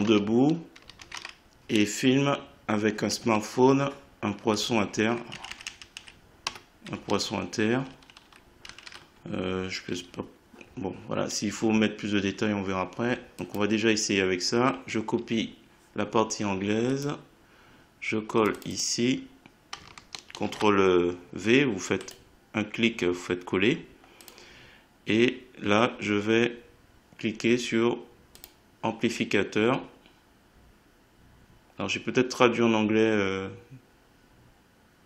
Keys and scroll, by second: 0.0-1.0 typing, 3.0 Down, 4.6 Left, 6.4 BackSpace, 7.0 Right, 20.4 ctrl+v.